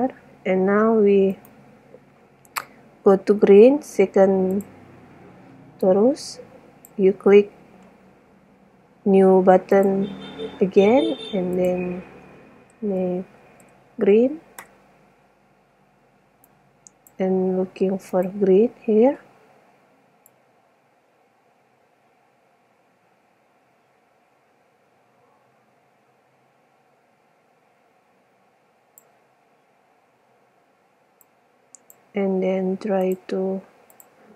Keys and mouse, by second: 0.0 Escape, 1.5 right click, 4.6 click, 6.0-8.0 drag, 9.9-11.6 drag, 11.8 click, 13.1 click, 13.6 e, 16.5 click, 20.0 middle click, 31.3 click.